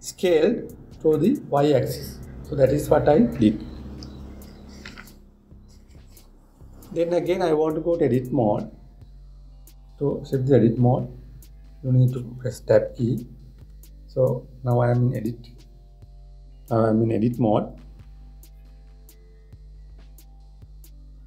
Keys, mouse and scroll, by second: 14.3 Tab.